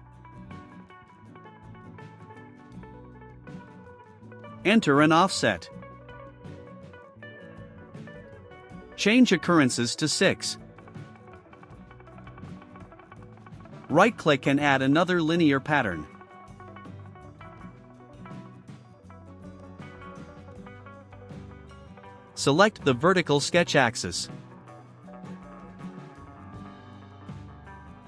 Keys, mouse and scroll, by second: 0.7 click, 2.8 click, 4.6 click, 5.4 2, 5.9 8, 7.7 click, 9.3 click, 10.3 6, 15.1 right click, 19.0 click, 21.7 click, 25.4 click.